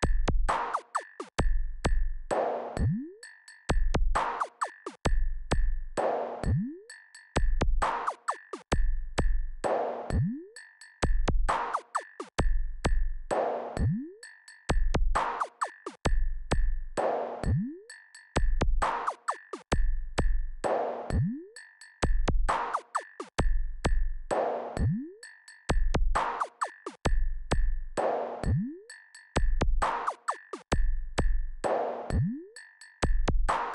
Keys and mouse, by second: 1.9 click, 3.0 click, 4.6 click, 6.3-6.6 drag, 7.9 click, 10.3-11.1 drag, 12.6 click, 21.6-33.5 drag.